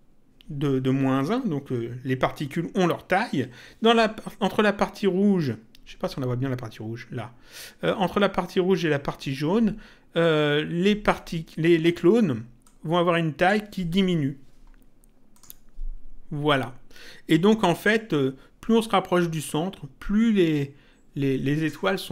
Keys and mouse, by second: 12.6 click, 15.3 click.